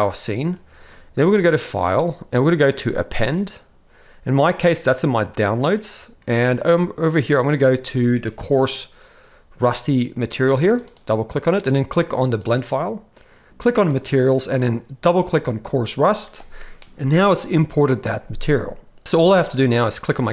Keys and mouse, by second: 1.9-3.4 drag.